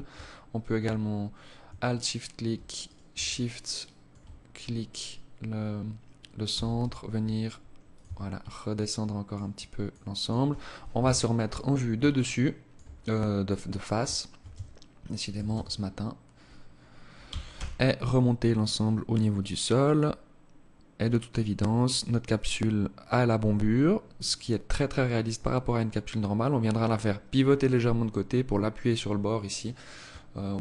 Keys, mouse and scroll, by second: 1.0 alt+shift+right click, 2.0 shift+right click, 2.6 alt+click, 3.6 scroll down 3, 5.8 g, 7.2 Tab, 7.7 alt+click, 8.8 alt+click, 9.3 alt+click, 10.2 KP_1, 11.4 alt+shift+click, 12.2 scroll down 3, 12.8 scroll up 1, 13.7 Tab, 14.6 a, 14.7 a, 15.0-16.2 scroll up 2, 16.4 g, 20.7 Tab, 23.6-25.2 scroll down 3, 24.0-25.2 scroll up 1, 28.4-29.9 scroll down 8, 29.9-30.3 scroll down 1, 30.3-30.6 scroll down 1.